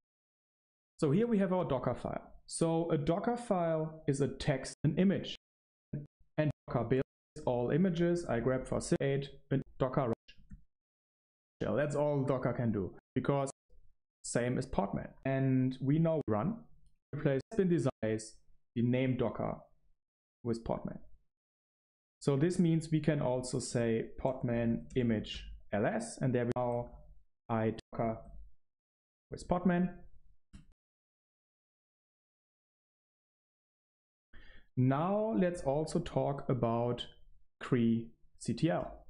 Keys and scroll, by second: 0.9 ctrl+alt+shift+3, 2.6 super+1, 2.9 ctrl+alt+shift+3, 2.9 super+1, 4.6 Right, 5.2 Right, 5.6 Right, 5.9 Right, 6.9 Right, 7.0 Right, 7.0 Right, 16.1 Right, 16.9 Right, 17.3 Right, 17.8 Right, 18.1 typing, 30.6 Right.